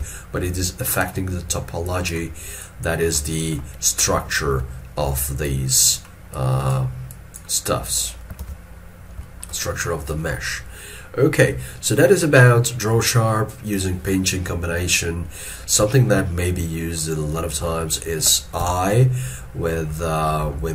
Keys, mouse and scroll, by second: 3.3 middle click, 7.7 double click, 8.5 alt+e, 8.9-9.3 scroll down 1, 15.1-15.9 scroll up 1, 16.0 shift+middle click, 20.0-20.7 scroll up 1.